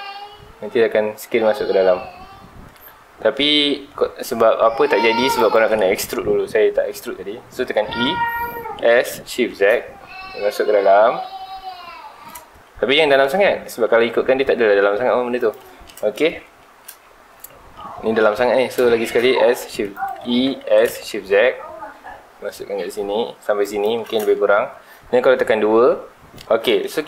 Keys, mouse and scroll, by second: 5.5 right click, 7.9 e, 15.5 shift+click, 15.8-17.5 middle drag, 17.5-18.2 scroll up 1, 18.2 ctrl+z, 20.0 right click, 20.3 e, 23.8 shift+click, 24.3-25.7 shift+middle drag, 25.7 2.